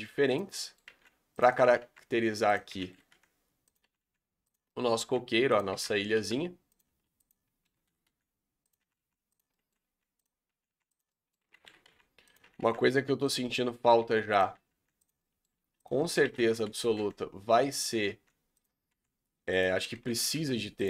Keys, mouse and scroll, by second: 0.6 middle click, 1.0 r, 1.6 r, 2.7 shift+d, 3.1 r, 3.8 r, 4.6 middle click, 5.0-8.8 typing, 9.5 middle click, 9.8-12.4 typing, 11.0 middle click, 13.4 middle click, 14.0 r, 14.5 r, 15.2-15.5 middle drag, 15.5 s, 16.0 middle click, 16.2 shift+d, 16.6 r, 17.9 r, 18.9 r, 20.0 shift+d, 20.3 r.